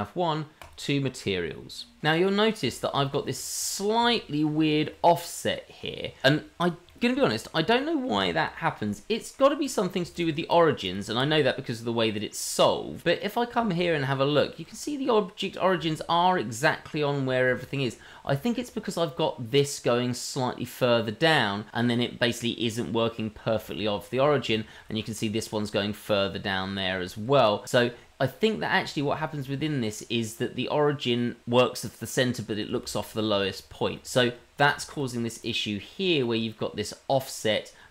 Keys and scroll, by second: 13.8 shift+z, 32.7 shift+z, 34.2 shift+z, 34.8 shift+z.